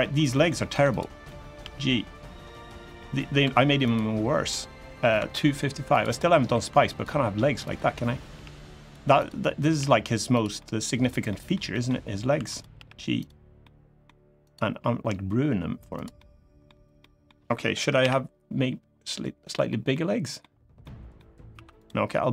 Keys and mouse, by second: 0.0 middle click, 0.6 click, 0.6 3, 1.0 middle click, 1.3 g, 2.2 click, 2.7 middle click, 3.2 2, 3.6 click, 4.2 middle click, 4.9 2, 5.9 middle click, 6.7 click, 6.7 2, 7.4 click, 8.1 g, 8.6 click, 9.5 g, 10.1 click, 10.3 middle click, 10.7 middle click, 11.0 middle click, 11.4 middle click, 12.1 1, 12.5 g, 12.9 click, 13.4 middle click, 14.2 click, 14.5 g, 15.7 click, 15.9 middle click, 16.7 middle click, 17.7 KP_1, 19.6 middle click, 20.6 middle click, 22.0 click, 22.0 3, 22.2 g.